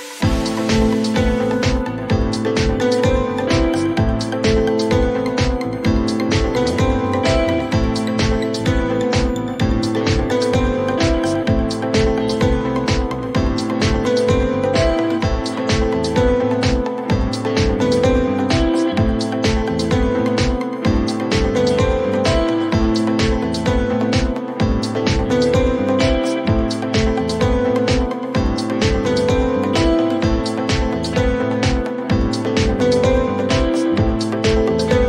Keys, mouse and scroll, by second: 1.6 click, 6.0 click, 9.4 click, 11.6-13.1 typing, 14.8 click, 14.9 click, 18.1 click, 18.3-19.3 typing, 21.1 click, 21.4-22.2 typing, 24.9 click, 25.1-25.8 typing, 26.0 Return, 29.3 click, 30.6 ctrl+d, 34.5 click.